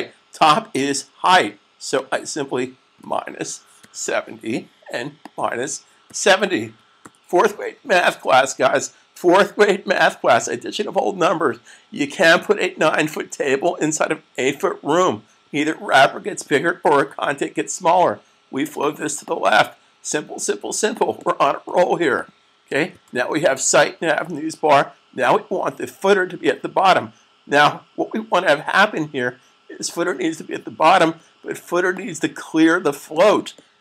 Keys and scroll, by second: 2.8-3.9 typing, 5.9-6.8 typing, 22.7 super+s.